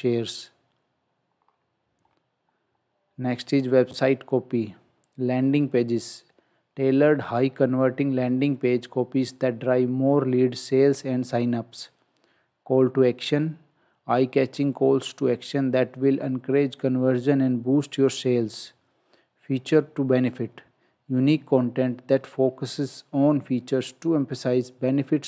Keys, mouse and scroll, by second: 0.3 click, 1.4-2.1 scroll down 1, 2.6-3.7 scroll up 1, 4.5 scroll down 1.